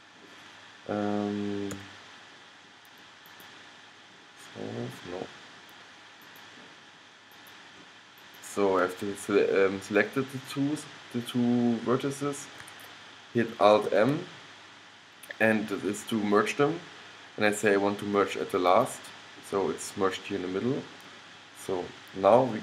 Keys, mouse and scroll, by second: 1.9 x, 6.4-10.0 middle drag, 14.0 alt+m.